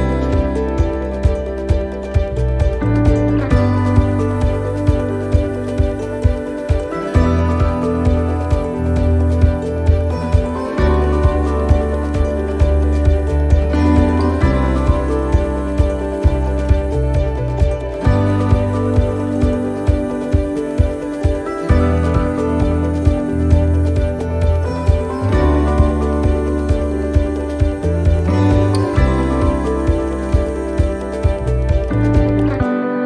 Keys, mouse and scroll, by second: 0.9-1.5 scroll down 2, 2.1 a, 3.8 click, 9.2 click, 25.3 middle click, 26.5-26.9 scroll down 2, 26.9 middle click, 28.3-29.0 scroll up 5, 29.8 click, 32.0 middle click.